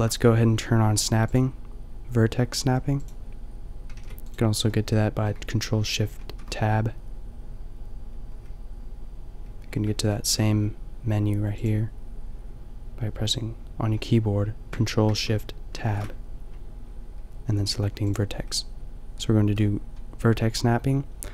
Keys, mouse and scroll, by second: 1.3-3.9 drag, 3.9 g, 4.3-6.2 drag, 6.2 ctrl+shift+Tab, 10.1 ctrl+shift+Tab, 11.6-13.4 drag, 15.7 ctrl+shift+Tab.